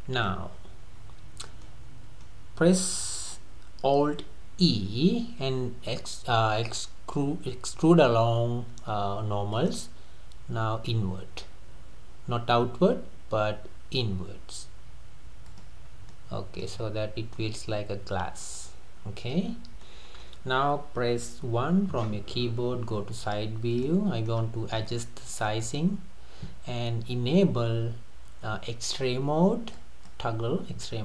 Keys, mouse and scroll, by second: 4.7 alt+e, 15.9 scroll down 2, 16.1 middle click, 16.8-17.3 scroll up 4, 17.3-19.5 middle drag, 19.5-19.9 scroll down 3, 19.9-21.4 middle drag, 21.4 KP_1, 23.0 scroll up 2, 23.2-23.8 scroll down 3, 23.8-24.4 shift+middle drag, 24.4-24.9 scroll up 2, 24.9-27.9 shift+middle drag, 29.7-31.0 drag.